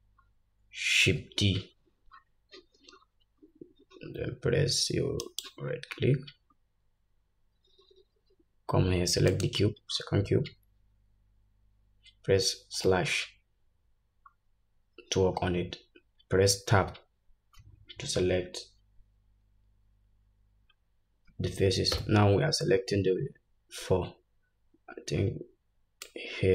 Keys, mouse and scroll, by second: 1.2 shift+d, 12.8 /, 16.8 Tab, 21.9 3, 26.1-26.5 drag.